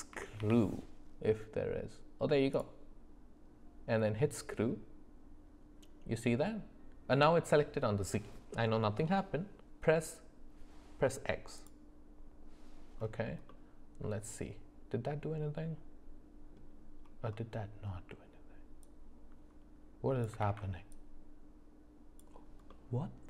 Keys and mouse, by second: 11.6 click, 13.5-16.6 middle drag, 18.8-20.3 drag, 20.4 ctrl+z, 20.9-22.2 drag, 22.7-23.2 middle drag.